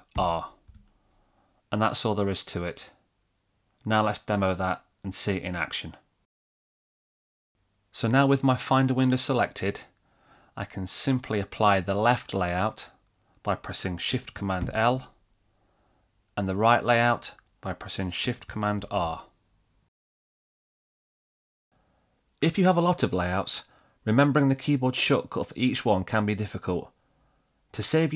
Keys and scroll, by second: 1.0 shift+super+r, 15.2 shift+super+l, 19.4 shift+super+r.